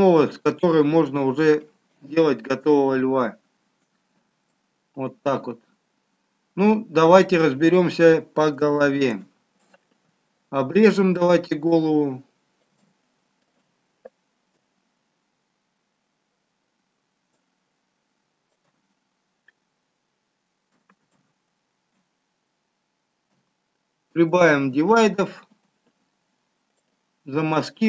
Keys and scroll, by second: 21.3 ctrl+z, 23.6 ctrl+d.